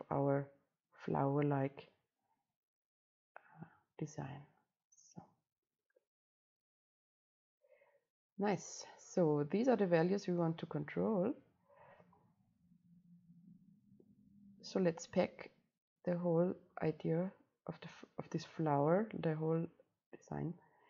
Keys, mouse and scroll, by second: 7.8-17.7 right drag, 17.7-20.0 drag, 20.0 right click.